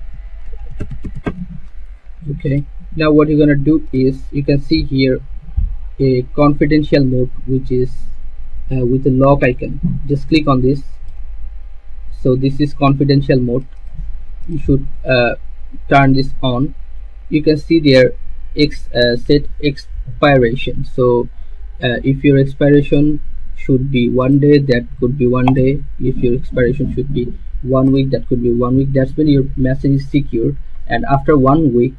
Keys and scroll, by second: 0.0-2.6 typing.